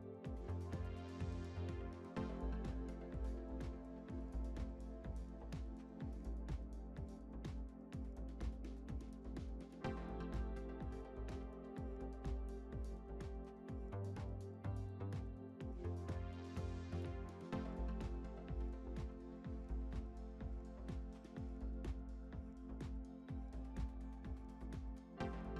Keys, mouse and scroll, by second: 0.3-4.5 drag, 5.1-8.0 middle drag, 8.4-9.1 middle drag, 9.0-9.5 scroll up 2, 10.9 scroll up 1, 10.9 click, 12.0 Tab, 13.6 click, 15.2 click, 17.6 Tab, 18.6 click, 19.0-19.6 scroll up 3, 19.7 shift+click, 20.5 shift+click, 21.3 shift+click, 21.9 shift+click, 22.5 shift+click, 23.1-23.7 scroll down 2, 23.7-24.7 middle drag, 24.7 click.